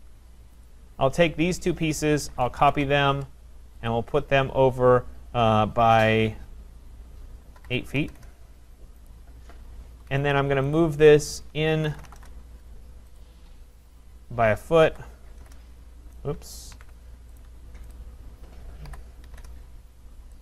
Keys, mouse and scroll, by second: 0.7 click, 1.6 click, 2.3 typing, 2.7 Return, 3.9 typing, 3.9 click, 7.6-8.5 typing, 9.1 click, 9.9 Escape, 10.1 Escape, 10.2 Escape, 10.7 click, 11.6-12.6 typing, 13.2 click, 14.7-16.2 typing, 16.8 ctrl+z, 17.4 right click, 17.9 click, 18.9 Return, 18.9-19.3 typing, 19.4 Return.